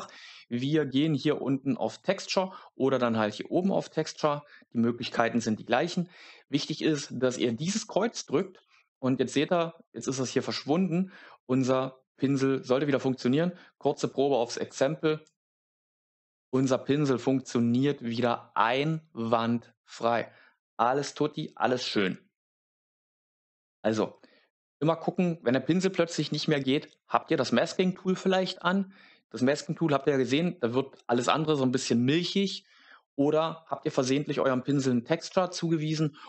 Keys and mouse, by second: 1.9 click, 3.7-8.8 drag, 14.5 click, 15.1 click, 34.7 click.